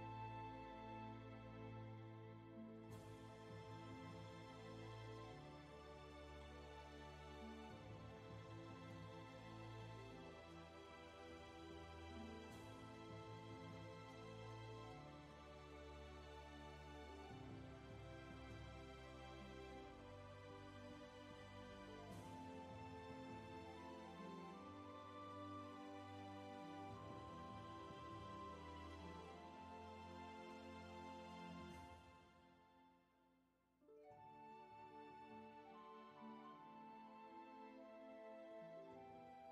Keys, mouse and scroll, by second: 21.7 ctrl+z, 26.7 ctrl+shift+z, 31.0 ctrl+z, 37.6 ctrl+shift+z.